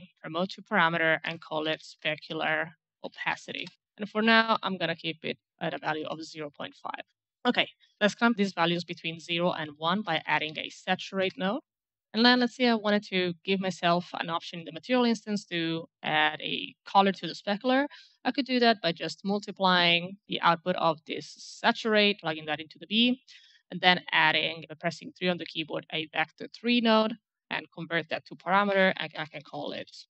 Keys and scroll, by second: 1.1-3.7 typing, 5.7 KP_5, 5.9 Return, 9.4-11.1 typing, 11.2 Return, 18.7 m, 18.8 m, 19.1 m, 19.3 m, 24.5-24.8 3, 25.2 3, 28.6-30.0 typing.